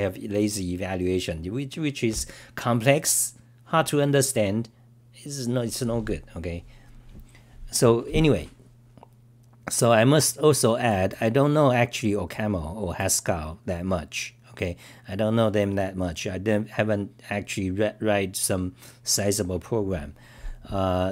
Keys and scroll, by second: 16.7-17.4 typing.